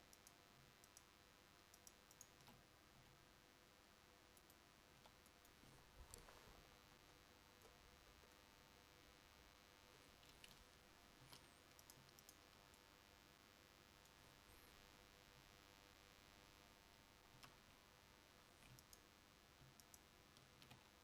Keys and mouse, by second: 3.1 g, 11.3 a, 17.6 a.